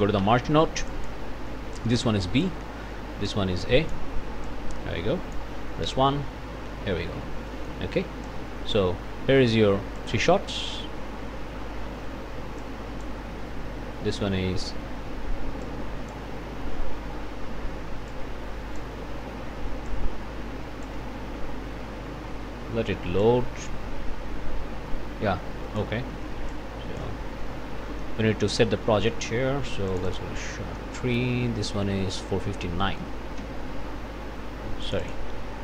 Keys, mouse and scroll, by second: 0.2 m, 0.9 click, 1.8 click, 3.3 click, 4.5-5.6 drag, 5.8 1, 7.5 click, 8.2 click, 10.0 click, 12.6 click, 15.6 click, 18.1 click, 19.9-21.0 drag, 23.2-26.0 drag, 26.5 ctrl+click, 27.6 scroll down 2, 28.2 click, 28.8 click, 29.9 click, 32.8 click, 33.4 s, 34.8 click.